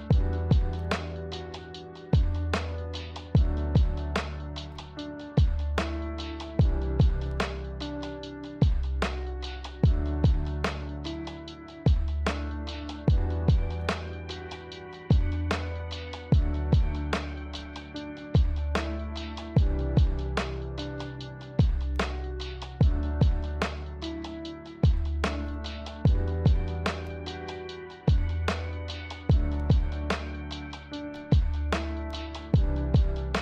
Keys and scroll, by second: 8.5 v, 14.4 z.